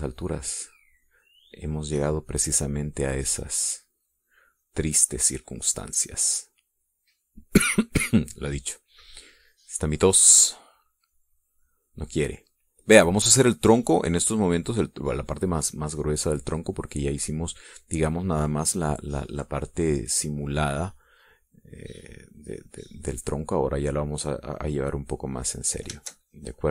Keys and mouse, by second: 0.0-4.6 drag, 4.8 click, 5.8 click, 6.8 click, 12.4-15.0 drag, 15.4-16.4 drag, 16.6-17.7 drag, 21.4 click, 22.4-24.6 drag, 24.8-26.7 drag.